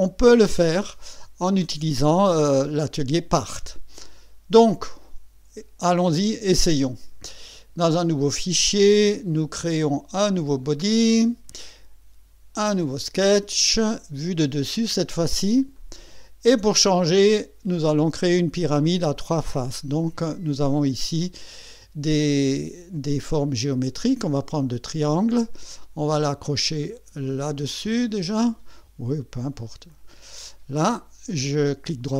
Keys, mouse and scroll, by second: 5.9 click, 6.2 middle click, 10.7 click, 12.5 click, 14.5 click, 15.8 click, 22.5 click, 24.6 click, 27.9 click, 29.9 click, 31.5 right click.